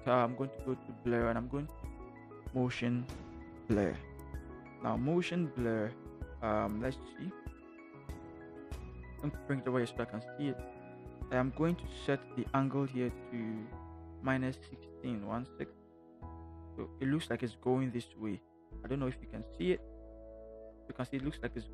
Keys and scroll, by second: 14.6 -, 20.1 ctrl+=.